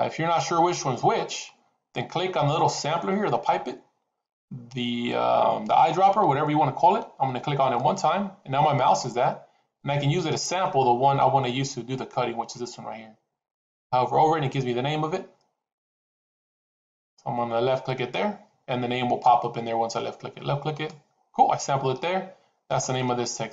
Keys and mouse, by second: 7.7 click, 22.8-23.5 middle drag.